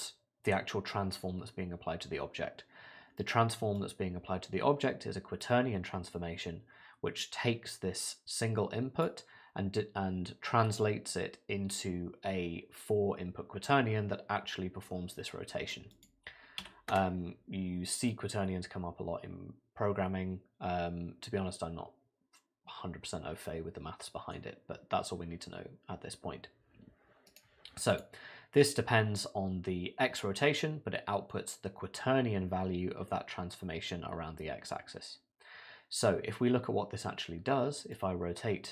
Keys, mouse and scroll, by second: 3.8 click, 7.2 click, 15.9 click, 18.1 middle click, 27.3 right click, 37.9 click.